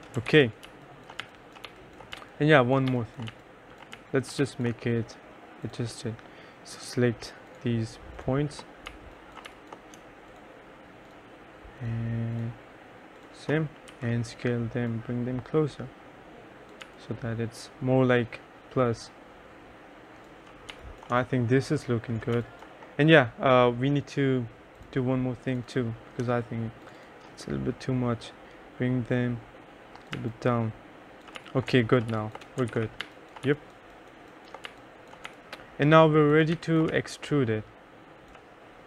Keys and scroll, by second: 0.4 ctrl+s, 0.7-4.5 typing, 9.0 2, 9.5 1, 14.0 t, 16.9 3, 20.8 2, 21.2 3, 22.4 2, 30.2-33.5 typing, 32.8 ctrl+s, 34.7 2, 35.4 3, 36.7 2, 37.0 3.